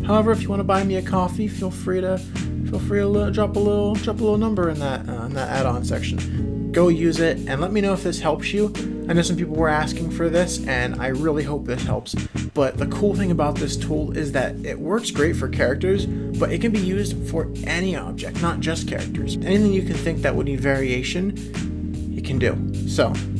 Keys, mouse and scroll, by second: 6.3 shift+click, 6.3 shift+2, 6.4 middle click, 7.1 click, 7.2 middle click, 7.2 g, 7.4 middle click, 7.7 Tab, 7.8-9.1 shift+drag, 8.0 e, 9.3 Tab, 9.4 middle click, 9.6-12.4 typing, 9.7 click, 10.0 click, 10.1 middle click, 10.3 middle click, 11.5 shift+click, 11.6 middle click, 11.9 click, 12.2 middle click, 12.3 middle click, 12.7 middle click, 13.0 middle click, 13.2 click, 13.3 middle click, 13.6 shift+click, 13.7 middle click, 13.8 g, 14.2 g, 14.4 middle click.